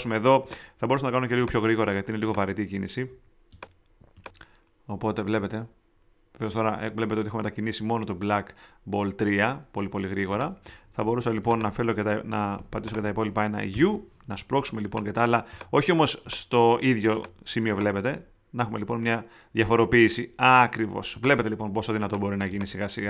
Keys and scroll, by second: 13.7 shift+θ.